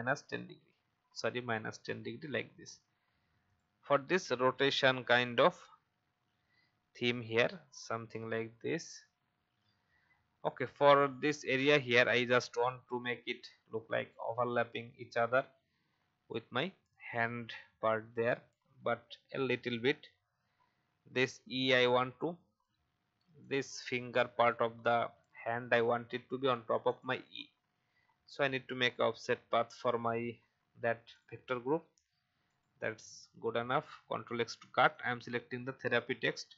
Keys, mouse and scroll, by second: 1.1-1.5 shift+scroll down 1, 3.4 click, 4.8 click, 5.6-6.4 Up, 11.1 Up, 13.9 Down, 14.6 Up, 15.1 Up, 15.2 Up, 17.1 Up, 17.4 Up, 19.0 alt+scroll up 1, 20.3 alt+Up, 23.3-32.2 drag, 33.4 ctrl+x, 34.1-34.9 alt+scroll down 1, 34.9 click.